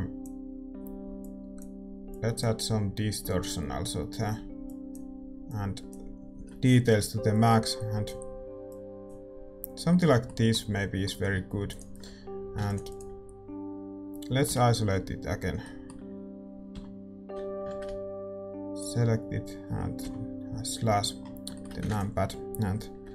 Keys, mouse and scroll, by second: 0.5-7.3 drag, 7.6-10.6 drag, 10.2 right click, 10.6-11.7 middle drag, 11.7-15.6 drag, 11.7-14.8 right drag, 12.7 ctrl+s, 14.8 KP_Divide, 15.6-17.8 middle drag, 17.8 shift+z, 18.7-21.1 right drag, 20.0 KP_Divide, 21.1-23.1 middle drag.